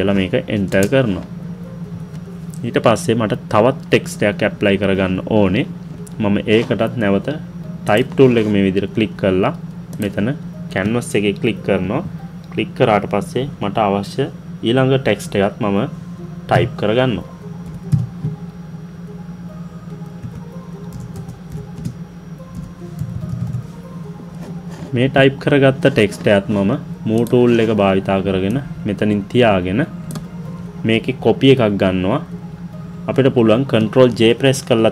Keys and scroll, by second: 33.7 ctrl+j.